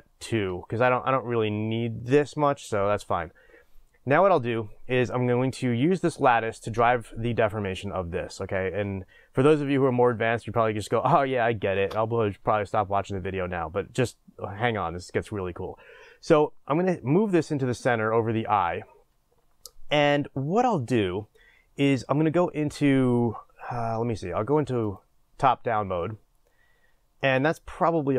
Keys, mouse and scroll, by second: 11.8 shift+space, 17.2-24.9 drag, 26.3-26.7 scroll down 2.